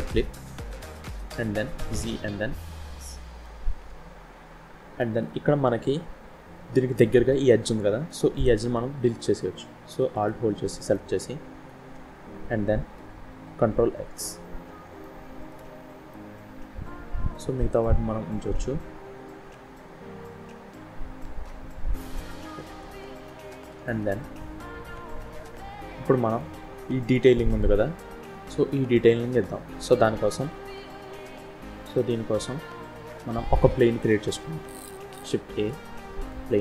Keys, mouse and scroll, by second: 1.2 z, 2.5-2.9 scroll up 1, 2.9 middle click, 3.7 Tab, 4.3-4.9 scroll up 2, 4.9 middle click, 4.9 scroll up 1, 7.4 scroll up 1, 8.0 shift+middle click, 10.0 alt+click, 10.9 middle click, 13.9 ctrl+x, 14.6 scroll down 3, 14.9 shift+middle click, 15.5-16.0 scroll up 2, 16.0 middle click, 22.6 shift+scroll down 2, 23.6 z, 25.1 KP_1, 25.6 scroll up 2, 26.1 shift+middle click, 26.3 shift+scroll up 1, 28.7-30.7 scroll down 4, 30.7 Tab, 31.5-32.8 scroll down 7, 32.8-33.4 scroll up 2, 33.4-33.8 scroll down 2, 35.3 shift+a.